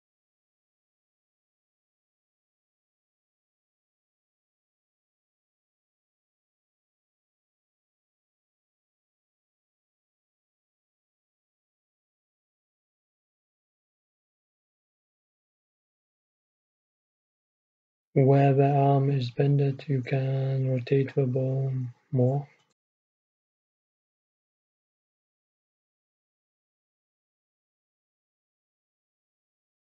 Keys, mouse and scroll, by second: 0.5 middle click, 1.5-4.0 middle drag, 3.1 r, 5.2-7.9 right drag, 6.3 r, 7.9 e, 11.2 e, 19.5-23.4 middle drag, 23.4 r, 25.0-26.2 middle drag, 26.5 KP_1, 26.5-27.6 middle drag, 28.1 middle click, 28.5 middle click, 29.4 middle click.